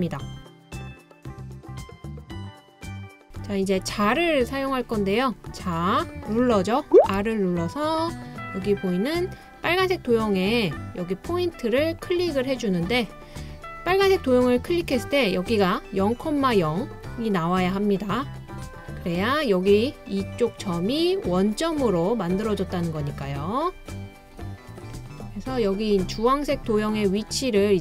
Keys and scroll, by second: 7.2 r.